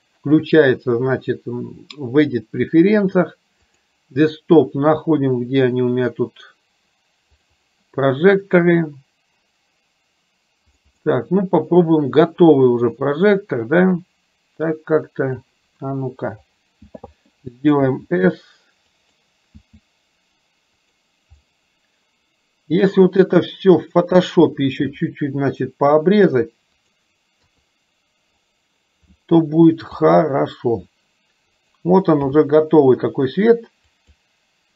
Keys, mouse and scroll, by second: 12.9-15.6 drag, 17.9 s, 19.7 s, 21.4-24.3 middle drag, 24.9 r, 27.4 KP_3, 30.1 r, 32.4 g.